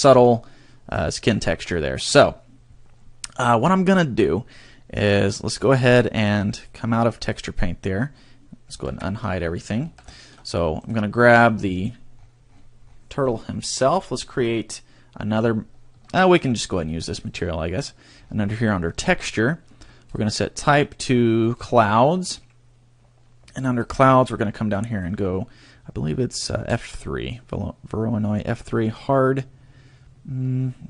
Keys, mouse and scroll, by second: 1.0 shift+middle click, 1.4 scroll up 2, 1.8 shift+middle click, 6.5 click, 8.8 alt+h, 9.3-9.8 scroll down 5, 9.8 a, 10.2 shift+middle click, 10.8 right click, 12.1-14.0 scroll up 19, 17.2 click, 17.2 scroll up 18, 18.4-20.0 scroll up 3, 20.0 click, 20.0-20.4 scroll up 2, 23.6 click, 23.9 scroll down 3, 24.8 click, 28.8 click.